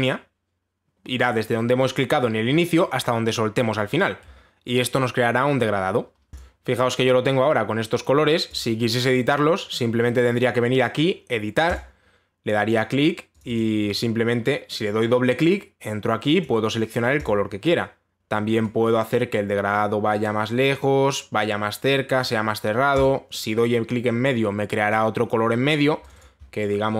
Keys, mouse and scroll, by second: 4.4 click, 7.0 click, 9.2 click, 12.4 click, 14.0 click, 14.2 click, 17.0 click, 17.9 click, 22.8 click, 23.6 click, 26.4 click, 26.7 click, 26.8 click.